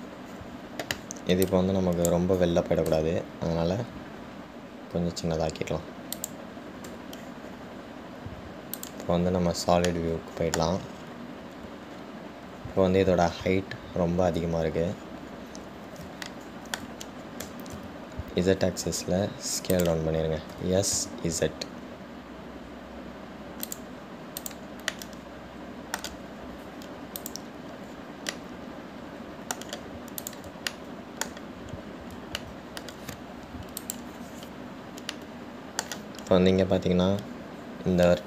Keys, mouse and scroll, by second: 2.7 click, 10.0 click, 10.9 scroll down 1, 11.0 scroll up 1, 11.1-12.1 middle drag, 12.1-12.5 scroll down 4, 13.1-14.5 scroll up 4, 16.1-17.5 scroll down 2, 17.5-18.6 shift+middle drag, 18.6 s, 25.6 click, 26.1-28.4 middle drag, 28.4 click, 29.5-31.4 middle drag, 31.4 click, 31.9-33.0 shift+middle drag, 33.0-33.6 scroll up 1, 33.6-35.0 shift+middle drag, 35.0 click, 36.3-38.2 middle drag.